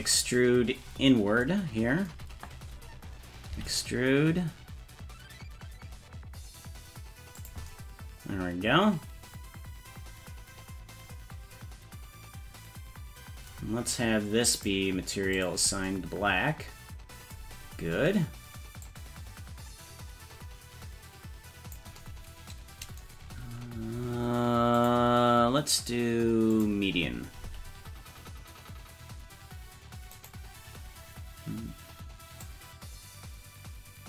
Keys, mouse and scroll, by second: 3.5 e, 14.6 click, 18.8-21.7 drag, 24.7-26.6 drag, 27.4 s, 32.4-34.0 drag.